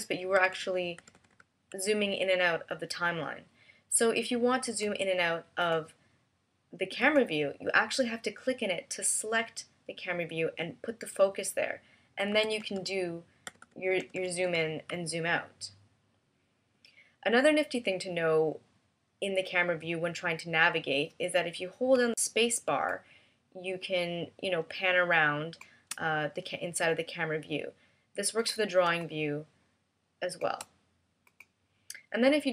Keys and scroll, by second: 0.3 super+-, 0.9 super+=, 13.4 super+=, 13.9 super+-, 14.4 super+=, 21.9 space, 29.4 space.